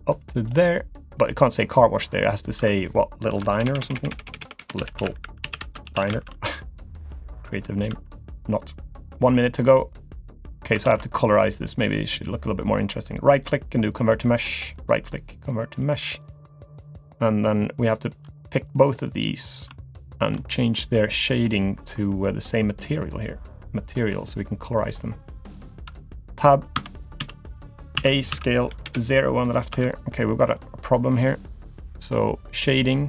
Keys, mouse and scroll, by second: 0.7 middle click, 1.7 click, 2.2 click, 2.6 Tab, 3.5-6.3 typing, 6.9-7.3 scroll down 2, 7.3 shift+middle click, 7.9 Tab, 8.1 click, 9.2 click, 10.4 click, 10.8 ctrl+z, 11.3 click, 13.1 right click, 14.3 click, 14.8 right click, 16.2 click, 17.9 shift+click, 18.7 click, 19.1 click, 20.0 shift+click, 24.8 click, 25.9 Tab, 26.1 click, 26.7 Tab, 27.2 a, 28.0 a, 28.3 s, 29.7 Tab, 30.5 click, 31.4 click.